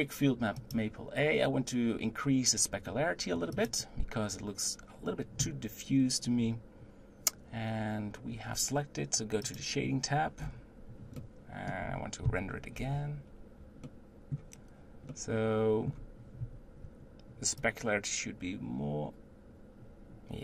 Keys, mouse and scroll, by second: 2.8 click, 3.6 click, 9.6-10.4 drag, 10.4-11.2 scroll down 5, 11.2-12.8 middle drag, 12.8 z, 13.9-18.1 middle drag, 18.1-20.4 drag.